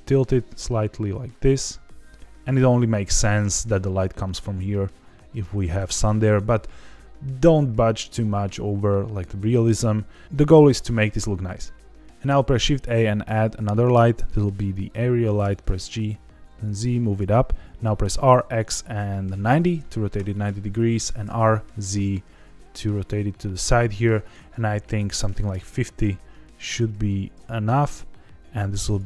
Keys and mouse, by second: 2.5 click, 12.3 shift+a, 15.4 g, 15.6 z, 17.0 click, 18.0 r, 18.3 x, 19.4 KP_9, 19.5 KP_0, 20.1 KP_Enter, 21.0 r, 21.2 z, 23.4 click, 24.2-25.9 drag, 26.6 g, 26.9 z, 27.3 z, 28.9 click.